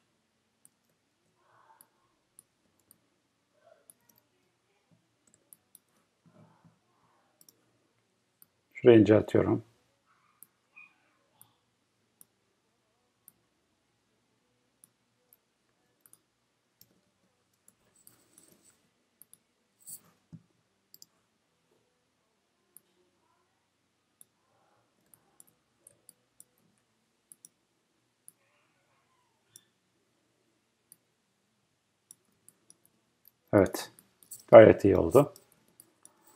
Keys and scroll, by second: 17.0 Escape.